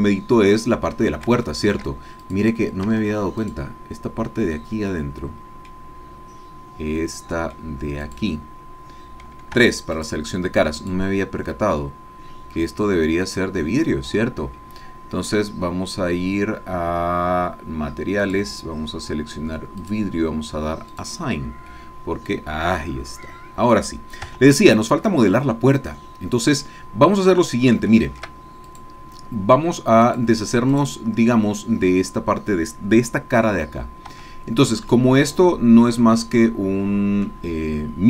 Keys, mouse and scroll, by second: 0.6-2.0 middle drag, 2.2 shift+click, 3.0 Tab, 3.4 click, 4.4-5.8 middle drag, 5.8-6.7 scroll up 1, 7.0 middle click, 7.7-8.2 scroll up 1, 8.2 click, 9.6 3, 9.9 click, 10.9 click, 11.5-15.3 middle drag, 18.2 click, 19.8 click, 20.9 click, 21.7-23.9 middle drag, 24.3 Tab, 25.0-26.8 drag, 26.8-27.4 scroll up 1, 27.4-27.8 scroll down 1, 27.9 shift+click, 28.6 shift+click, 30.0 click, 30.7 click, 34.2 Tab, 34.9-37.4 drag.